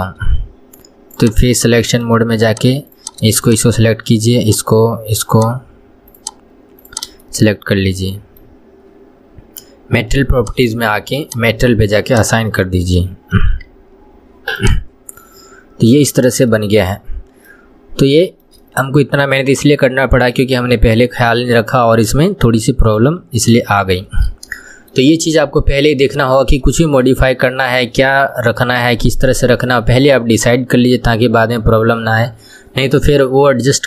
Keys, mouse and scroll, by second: 0.1 shift+middle click, 0.5-1.5 scroll down 1, 1.5 click, 1.9 middle click, 2.8 click, 3.2 click, 3.7 shift+click, 4.8 shift+click, 5.6 shift+click, 6.4 shift+click, 7.2 shift+click, 7.6-10.6 middle drag, 10.7 click, 11.6 click, 12.4 click, 12.9-13.7 middle drag, 13.7 KP_1, 14.2 Tab, 14.4 scroll down 2, 14.8 click, 15.8 scroll up 1, 16.2 scroll down 1, 16.8-18.1 middle drag, 18.1 scroll up 1, 18.6 shift+middle click, 18.9 scroll up 1, 19.1-21.0 middle drag, 21.0 scroll down 1, 21.2-23.4 middle drag, 23.4 KP_1, 23.7 scroll down 1, 24.1-28.7 shift+middle drag.